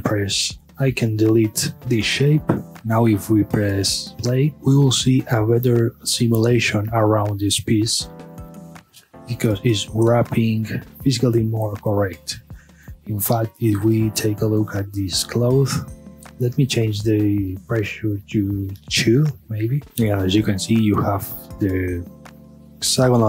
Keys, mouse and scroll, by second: 0.2-0.7 scroll down 1, 0.7 click, 1.3-1.7 scroll up 1, 1.7 x, 2.7 click, 2.8-4.3 scroll down 1, 4.3 space, 11.6 space, 13.4 click, 15.6 KP_Divide, 20.3-21.3 middle drag, 21.3-23.0 scroll down 1, 23.0 scroll up 1.